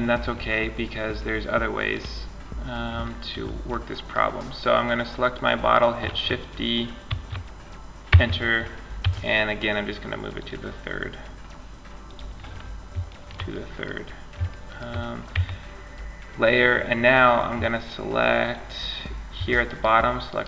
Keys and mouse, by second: 1.1 click, 1.7 middle click, 1.9-3.1 drag, 6.3 shift+d, 8.2 m, 11.3 click, 12.0-13.1 drag, 14.5 Tab.